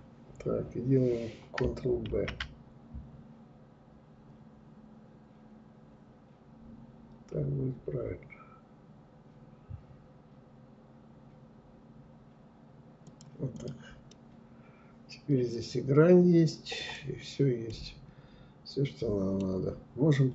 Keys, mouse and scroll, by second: 12.6 click, 13.1-16.0 middle drag, 16.0 scroll down 3, 16.7-18.9 middle drag, 18.9 scroll down 1, 19.5-20.3 middle drag.